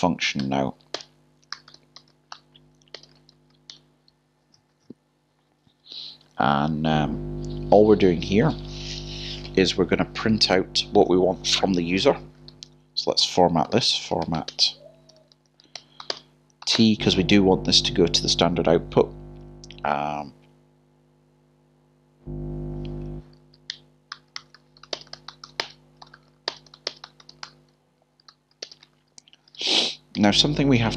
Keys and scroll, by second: 0.0-1.4 typing, 3.0 typing, 13.6 typing, 15.1 typing, 16.4-17.1 typing, 24.1 ", 28.3 typing, 29.6 :, 30.1 ).